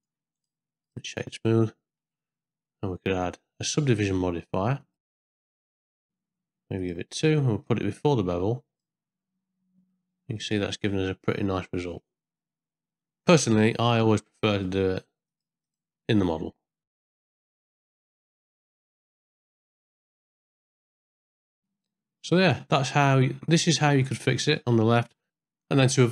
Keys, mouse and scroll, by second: 0.4 right click, 1.6 middle click, 3.2 middle click, 4.8 click, 5.1 click, 5.4 click, 6.8 click, 7.6-8.8 drag, 9.9-13.2 middle drag, 14.5 click, 15.3 click, 15.7 click, 16.8 Tab, 17.1 alt+e, 17.3 middle click, 17.7 ctrl+i, 17.8 alt+e, 18.3 q, 18.7 ctrl+b, 19.3 middle click, 19.5 middle click, 19.7 ctrl+Tab, 19.8 ctrl+2, 19.8 middle click, 20.0 middle click, 20.3 Tab, 20.4 middle click, 20.6 ctrl+z, 20.7 ctrl+z, 20.9 ctrl+v, 21.1 ctrl+b, 21.2 Tab, 21.5 ctrl+2, 21.5 middle click, 21.7 middle click, 22.6 ctrl+middle click, 23.2 shift+middle click, 23.9 middle click, 25.3 middle click.